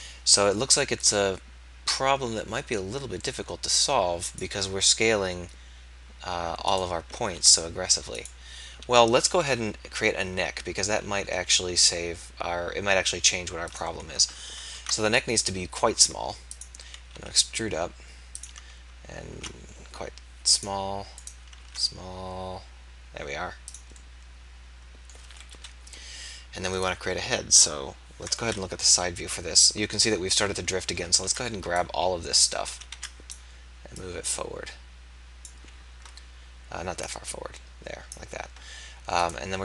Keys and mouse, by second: 7.2 ctrl+a, 9.5 e, 13.7-14.7 drag, 14.7 ctrl+a, 16.6 click, 17.2 e, 19.3 ctrl+a, 21.6 ctrl+a, 25.5 KP_1, 25.7 middle click, 28.4 KP_3, 31.0 a, 31.2 b, 32.8 a, 33.0 b, 34.2-35.9 drag, 37.1-39.6 drag.